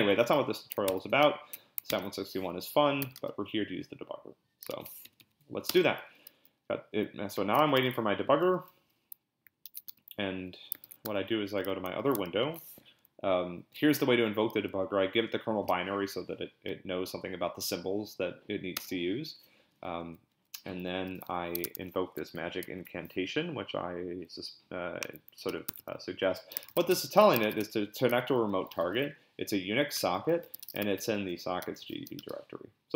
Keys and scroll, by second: 0.9 ctrl+c, 1.2 ctrl+l, 1.9 d, 3.0 q, 3.2 Return, 4.7 ctrl+l, 5.0 Up, 5.2 Up, 5.7 Return, 7.3-8.3 typing, 9.7 ctrl+x, 9.9 p, 10.8 ctrl+b, 11.0 p, 12.4 ctrl+l, 18.7 Return, 20.0 Up, 20.3 Up, 21.6 super+Tab, 25.5 super+c, 25.7 super+Tab, 26.3-32.5 typing.